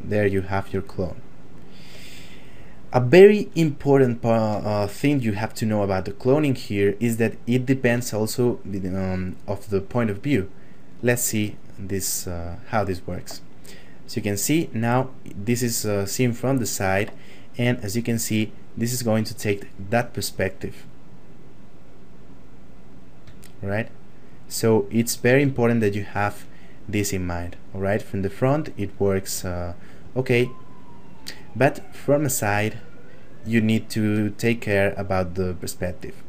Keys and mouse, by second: 0.9 shift+middle click, 6.4 middle click, 8.1 shift+middle click, 13.9 middle click, 17.8 click, 23.5 shift+middle click, 26.1 click, 30.0 click, 32.9 shift+middle click, 34.6 click.